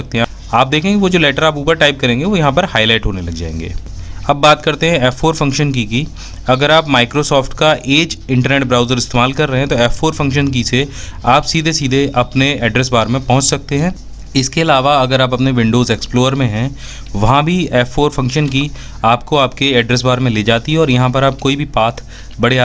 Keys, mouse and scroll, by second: 4.9 f, 5.9 F4.